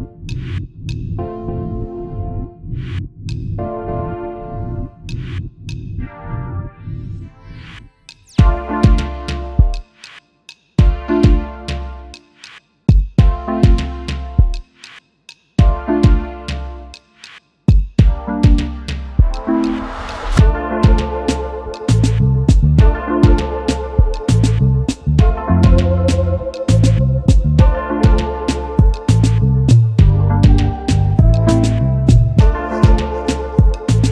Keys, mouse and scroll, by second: 1.4 ctrl+f, 3.5 alt+scroll down 1, 4.3 double click, 4.6 space, 5.4 space, 5.5 double click, 6.0 space, 8.1-8.7 typing, 10.5 alt+scroll up 1, 11.3 right click, 13.8 double click, 17.1 alt+scroll up 1, 17.6 space, 17.6 double click, 19.1 typing, 20.4 typing, 21.1 double click, 21.4 space, 25.3 alt+shift+click, 27.8 alt+shift+click, 30.5 double click, 33.0 shift+click.